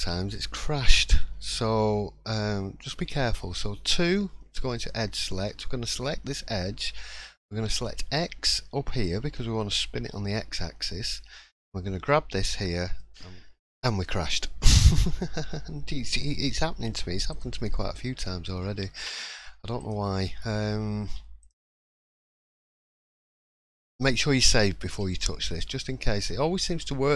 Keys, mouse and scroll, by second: 4.8 click, 7.7 click.